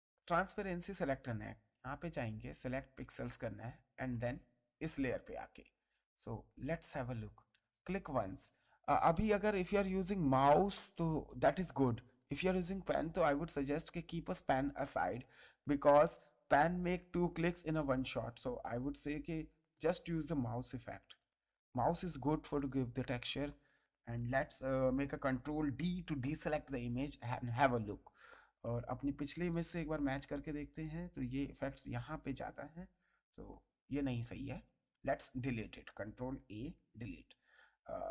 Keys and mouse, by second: 1.9 right click, 3.0 click, 6.8 click, 9.0 click, 10.5 click, 16.0 click, 26.1 ctrl+d, 29.3 click, 31.1 click, 35.4 ctrl+a, 36.6 Delete.